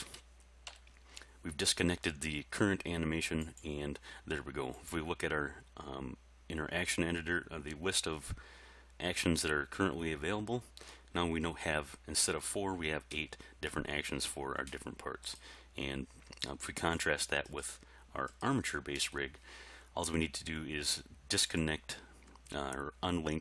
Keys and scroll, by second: 0.7 i.